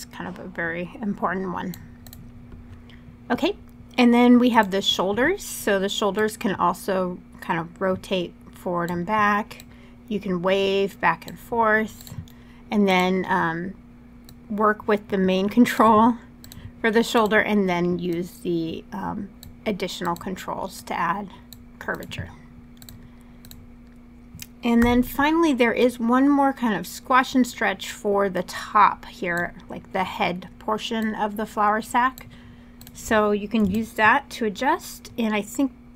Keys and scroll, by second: 24.5 w.